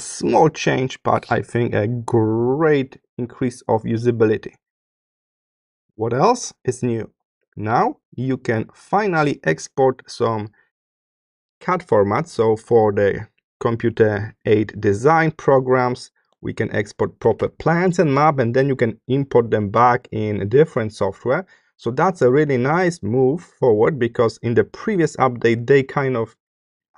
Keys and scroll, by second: 4.6 space, 7.8 space.